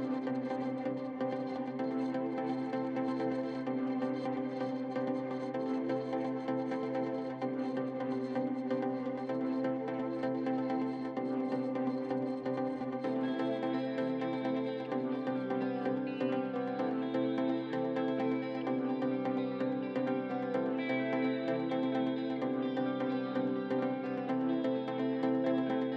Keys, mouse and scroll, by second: 0.0 middle click, 0.4 scroll down 2, 0.5 middle click, 1.2-1.6 scroll up 3, 1.6 alt+shift+click, 1.9 middle click, 2.8 scroll down 4, 3.1-4.1 middle drag, 4.1 click, 4.3 middle click, 4.8 click, 5.1 middle click, 5.4 click, 6.0 middle click, 6.2 click, 6.3 middle click, 7.1 click, 7.8 middle click, 8.3 click, 8.4 middle click, 8.8 click, 9.1 middle click, 9.4 click, 9.6 middle click, 9.9 click, 10.3-11.4 middle drag, 11.7 scroll up 3, 11.9 middle click, 12.5 x, 13.1 middle click, 13.3-13.8 scroll up 1, 14.2 middle click, 14.5-15.8 drag, 16.1 scroll down 4, 16.3-17.4 middle drag, 17.4 scroll up 4, 18.1 middle click, 18.9 shift+s, 19.4-19.7 scroll down 12, 19.7 middle click, 19.9 scroll up 2, 20.0 shift+middle click, 20.8 alt+click, 24.4 middle click, 25.0 scroll up 5, 25.4-25.8 scroll down 9, 25.8 middle click.